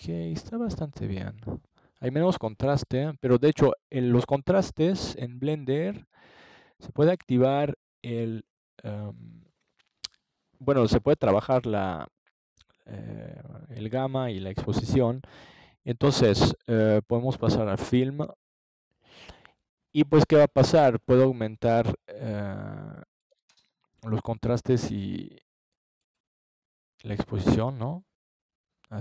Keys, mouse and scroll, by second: 5.4 click, 7.3 middle click, 8.2 click, 8.6-9.6 drag, 10.4-12.0 drag, 13.0 ctrl+s, 17.2 click, 19.4 middle click, 19.8 click, 22.5 ctrl+s, 26.6-29.0 drag.